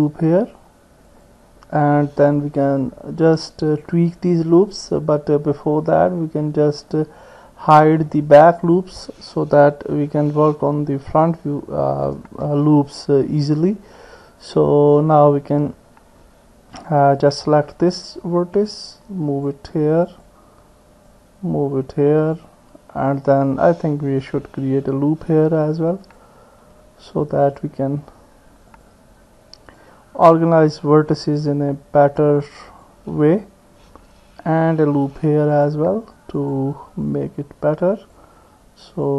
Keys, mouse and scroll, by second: 6.1 click, 6.1 middle click, 7.8 click, 10.0 h, 10.5 middle click, 12.1 KP_1, 17.2 click, 18.1-19.5 drag, 20.1 click, 21.1-22.5 drag, 25.0 ctrl+r, 28.7 click, 29.8-32.9 drag, 34.8 ctrl+r, 36.4 click, 37.1-38.2 drag, 39.0 click.